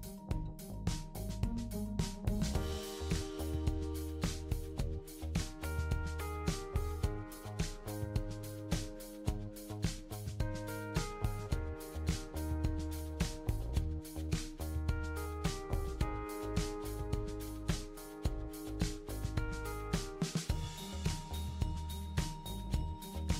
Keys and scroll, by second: 4.2 ctrl+d, 5.0 ctrl+d, 5.8 ctrl+d, 6.6 ctrl+d.